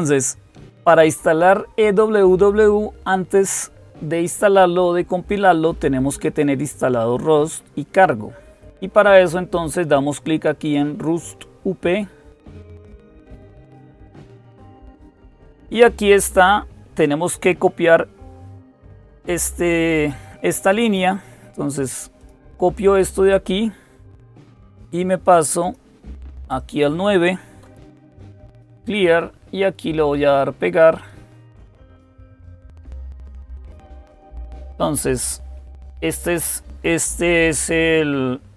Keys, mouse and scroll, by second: 13.2 click, 19.1-21.3 drag, 22.0 click, 25.4-26.5 drag, 27.2-28.6 typing, 30.7 click, 30.9 right click, 31.9 click, 33.5 Right.